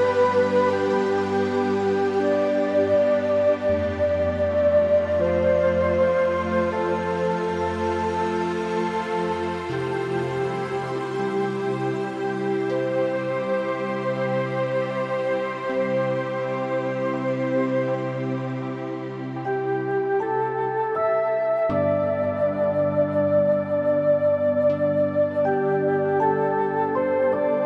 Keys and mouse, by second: 0.8 middle click, 1.1 shift+middle click, 1.3 middle click, 1.9 middle click, 2.4 shift+a, 4.0 click, 4.7 s, 6.9 shift+click, 8.0 shift+click, 8.5 g, 8.8 z, 10.7 click, 11.0 middle click, 11.6 s, 12.2 middle click, 13.3 middle click, 13.8 click, 14.3 g, 14.6 z, 15.5 click, 15.6 middle click, 16.4 click, 16.8 g, 17.0 z, 18.9 click, 19.3 middle click, 20.6 middle click, 20.9 click, 21.6 shift+click, 22.0 g, 22.3 z, 23.1 middle click, 23.4 shift+middle click, 23.8 middle click, 24.3 shift+middle click, 24.5 middle click, 25.3 click, 25.7 g, 26.0 z.